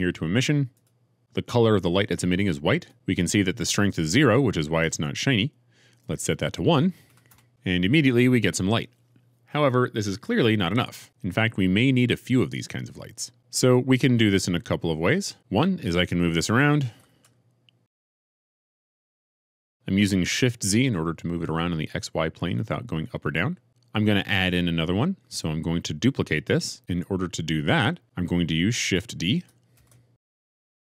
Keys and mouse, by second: 0.7 click, 0.8-2.7 middle drag, 2.7-7.3 drag, 17.0 shift+g, 17.2 shift+z, 19.8 g, 19.8 shift+z, 29.7 shift+d.